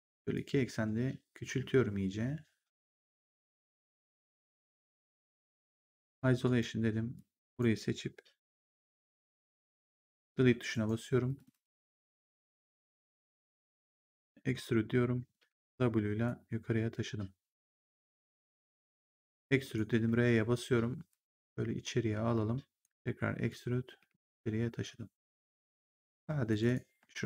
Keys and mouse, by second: 0.2 click, 5.6 ctrl+1, 6.3 right click, 7.1 click, 10.2 Delete, 10.6 right click, 11.2 click, 11.7 ctrl+1, 12.4 w, 13.9 click, 15.3 w, 16.2 click, 19.6 click, 20.0 r, 21.0 click, 23.4 click, 23.9 w, 24.8 click, 26.0 right click, 26.4 click.